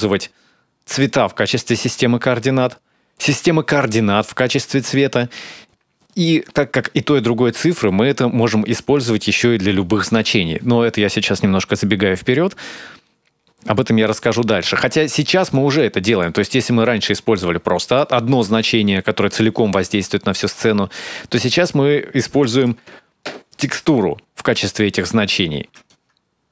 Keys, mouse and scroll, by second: 5.2-7.4 scroll down 1, 7.4 middle click, 7.4-8.4 scroll down 2, 12.4 middle click, 12.9-13.9 scroll up 2, 13.9 click, 15.0 click, 15.6 click, 16.3-17.2 scroll up 3, 16.6 middle click, 17.2 click, 22.4 ctrl+shift+click, 25.7 click.